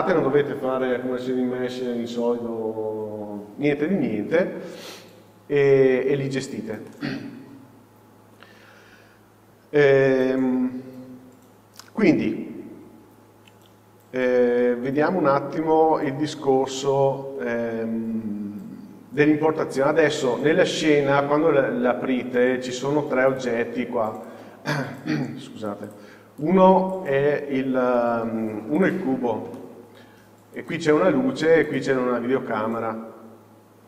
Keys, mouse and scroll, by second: 4.9-6.9 scroll down 1, 6.9-23.5 middle drag, 12.6-16.6 scroll down 1, 17.1 z, 19.5-21.3 scroll down 1, 21.3-22.7 scroll up 1, 23.5-26.0 drag, 28.8 click, 29.6 middle click, 30.6 click, 31.7 click.